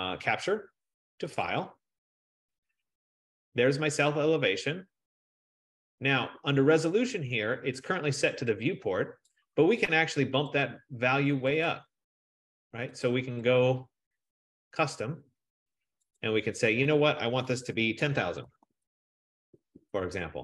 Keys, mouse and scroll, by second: 1.8-3.1 drag, 9.4 click, 10.4 F15, 10.9 click, 11.8 click, 13.7 click, 14.9 click, 16.3 click, 18.1-18.4 typing.